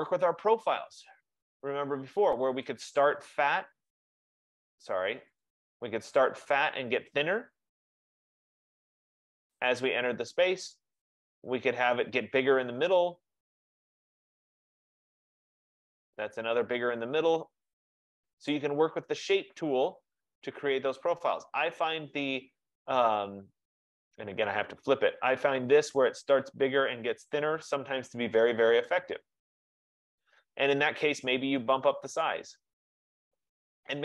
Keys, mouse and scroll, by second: 0.0 click, 2.9 click, 5.5 click, 9.7 click, 11.1 click, 11.1 F15, 14.5 click, 15.5 click, 18.7 click, 22.0 click, 24.9 click, 31.9 click, 32.3 click, 33.0 click.